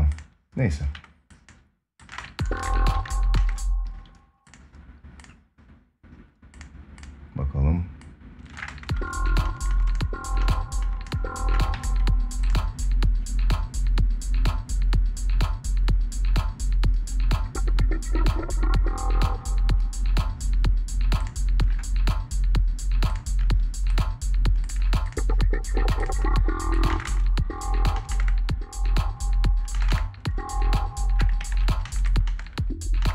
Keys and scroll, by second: 1.8 space, 2.7 ctrl+s, 3.1 space, 8.3 space, 11.5 ctrl+s, 26.6 space, 29.5 space, 31.1 ctrl+s, 31.6 space.